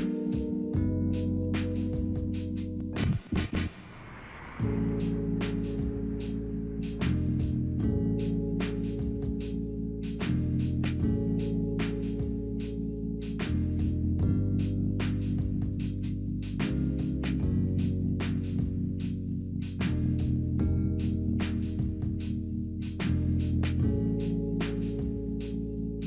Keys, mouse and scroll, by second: 22.2-23.0 typing, 25.9 scroll up 1.